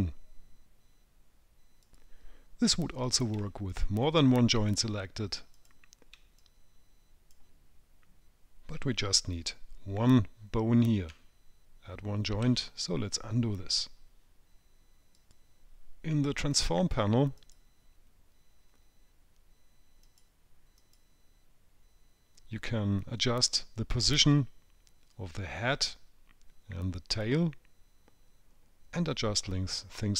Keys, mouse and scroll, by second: 4.1 click, 5.0 shift+click, 5.9 click, 6.7 click, 12.8 ctrl+z, 17.8 click, 20.4 click, 21.2 click.